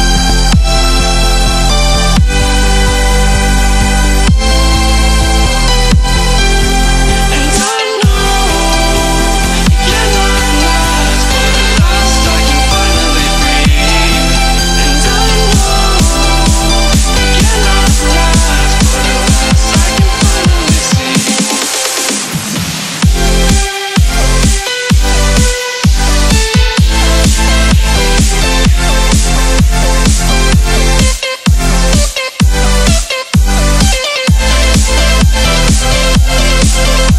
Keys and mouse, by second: 0.1 click, 0.3 space, 0.9 click, 2.4 ctrl+=, 2.7 space, 2.9 click, 3.0 space, 3.2 click, 3.3 space, 3.7 ctrl+-, 3.9 click, 3.9 space, 5.0 right click, 5.6 click, 6.5 BackSpace, 7.2 click, 7.4 right click, 7.9 click, 9.0 BackSpace, 9.5 click, 10.6 right click, 11.1 click, 12.0 right click, 12.6 click, 14.6 shift+click, 15.7 Up, 16.0 Left, 17.1 click, 18.2-19.6 shift+drag, 19.6 shift+click, 21.5-22.8 shift+drag, 22.8-28.7 shift+drag, 29.6 ctrl+-, 30.1 click, 30.3 space, 30.8-33.4 drag, 33.4-37.1 shift+drag.